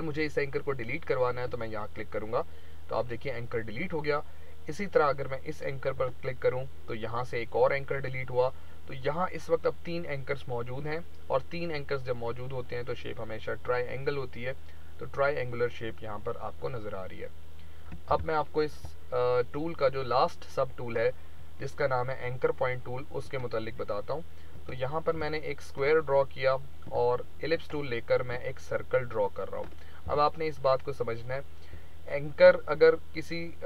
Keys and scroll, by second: 18.0 ctrl+a, 18.6 Delete, 30.0 a.